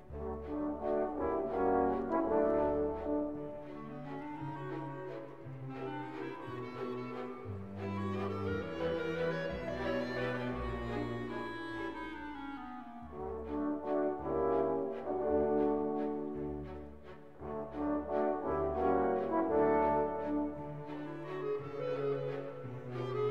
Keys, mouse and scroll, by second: 0.6 g, 4.7 ctrl+a, 6.7-9.1 drag, 9.1 ctrl+j, 10.4 F2, 12.5 BackSpace, 16.8 BackSpace, 16.9 BackSpace, 23.2 middle click.